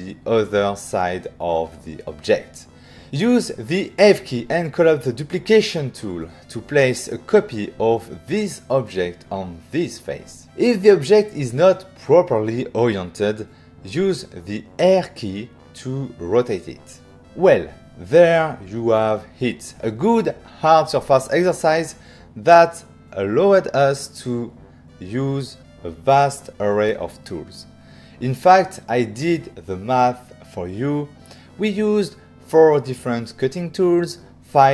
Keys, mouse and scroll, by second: 0.0 shift+middle click, 1.1 ctrl+middle click, 2.0 f, 2.9 click, 5.8 click, 6.6 right click, 13.9 f, 14.6 click, 15.6 ctrl+middle click, 16.5 ctrl+middle click, 17.3 middle click.